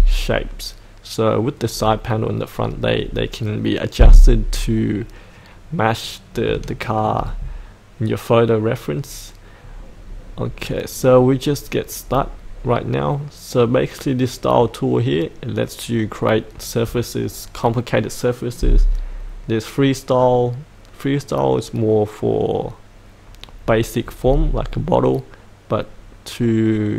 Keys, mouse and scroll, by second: 1.7-5.3 scroll up 1, 5.3-6.4 scroll down 1, 6.7 shift+middle click, 7.3-21.7 scroll up 1.